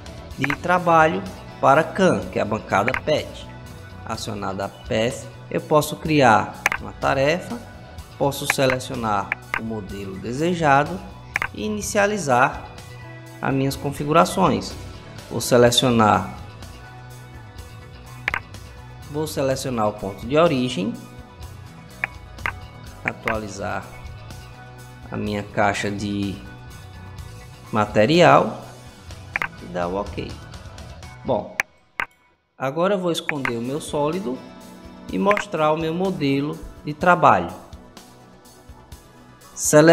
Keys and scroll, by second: 33.8 space, 35.9 space.